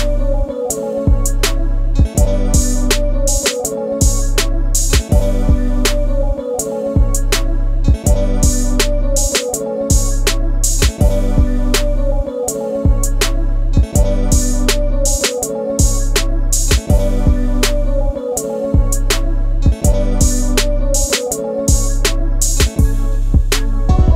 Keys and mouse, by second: 0.8 click, 1.9 g, 4.5 click, 5.5 click, 6.6 click, 12.6 KP_1, 13.7-15.7 drag, 16.5 click, 17.6 click, 18.4 click, 19.9 KP_1, 21.5 Tab, 22.2 Tab, 22.8 click.